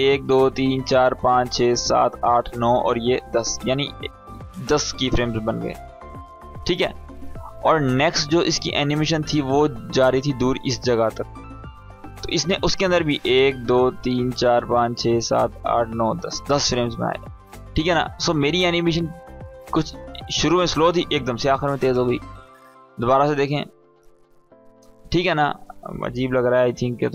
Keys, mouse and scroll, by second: 5.2-7.7 drag, 7.7-8.8 scroll down 1, 8.8 space, 8.9-9.5 click, 9.2 space, 10.5-10.8 scroll up 1, 10.8 space, 10.9-11.5 click, 11.3 space, 12.5-18.1 drag, 18.7 space, 21.2 space, 21.8-22.4 click, 22.4 space, 24.4 space, 24.8 click, 26.5 ctrl+k.